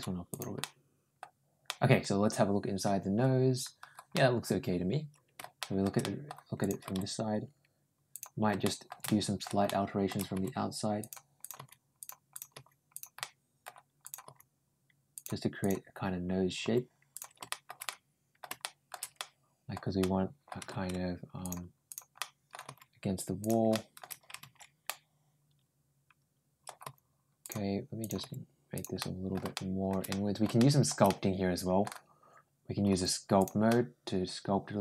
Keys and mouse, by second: 0.1 g, 0.4 middle click, 1.5-2.7 middle drag, 4.0-5.6 middle drag, 5.8 middle click, 6.4 click, 6.7 g, 8.4 middle click, 9.0 middle click, 9.5 middle click, 10.2 g, 11.2 click, 11.4 g, 12.1 click, 12.3 g, 13.0 middle click, 13.8 click, 14.1 g, 15.4 click, 16.5 g, 17.3 middle click, 17.7 middle click, 18.4 middle click, 19.0 middle click, 19.8 middle click, 21.2 ctrl+click, 21.7 ctrl+click, 22.0 ctrl+middle click, 22.5 ctrl+g, 23.5 middle click, 24.7-25.9 middle drag, 25.9 middle click, 26.7 ctrl+g, 27.8 click, 28.0 ctrl+g, 28.8 middle click, 29.3 middle click, 29.9 middle click, 30.4 middle click, 30.9 middle click, 32.7 g, 33.5-34.8 middle drag.